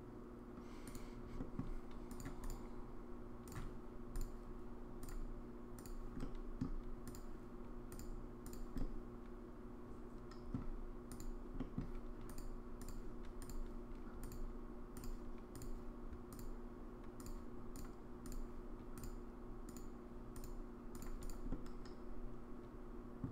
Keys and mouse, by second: 1.4 middle drag, 2.2 click, 2.4-3.5 drag, 5.2 click, 6.2-6.6 middle drag, 7.9 click, 8.8-10.5 middle drag, 11.2 click, 11.6 middle drag, 12.3 click, 14.2 click, 15.6 click, 16.4 click, 17.7 click, 18.2 click, 19.0 click, 20.4 click, 21.2 click, 21.5-23.2 middle drag.